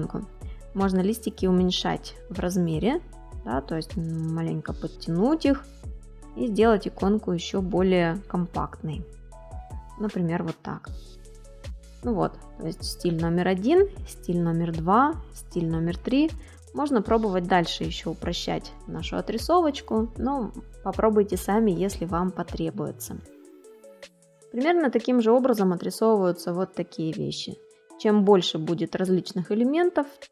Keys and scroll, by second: 17.9 space, 21.8 space.